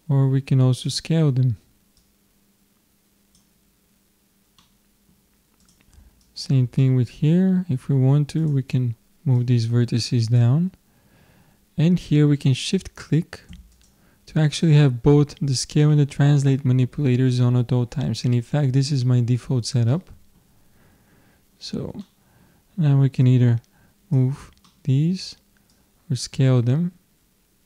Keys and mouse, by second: 0.7-3.9 drag, 4.6 middle click, 5.6-7.9 drag, 8.4-11.1 drag, 13.8-15.5 drag, 19.9-22.4 middle drag, 23.3-25.0 drag, 25.0 middle click, 25.8-27.5 drag.